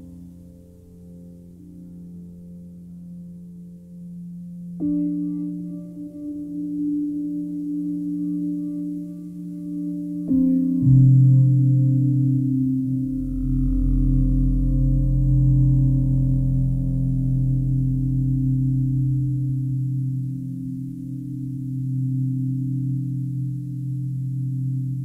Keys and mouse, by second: 0.0 typing, 0.1 ctrl+click, 0.3 ctrl+click, 2.0 shift+click, 2.2 shift+click, 2.8 shift+click, 2.9 shift+click, 4.0-5.5 alt+shift+drag, 6.6 shift+click, 6.9 shift+click, 7.4 shift+click, 7.8 alt+click, 8.7 s, 9.4 y, 10.7 click, 11.0-15.3 alt+drag, 15.9-17.3 alt+drag, 19.3 click, 21.2 click, 22.0 click, 23.1 click, 24.5 click.